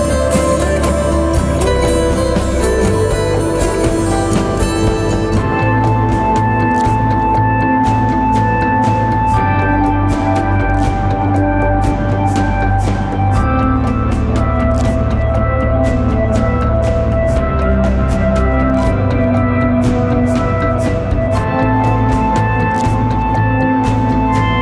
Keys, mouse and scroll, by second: 0.6-2.1 scroll down 1, 3.3 ctrl+click, 4.6-7.2 scroll up 1, 10.4 alt+click, 14.4 alt+click.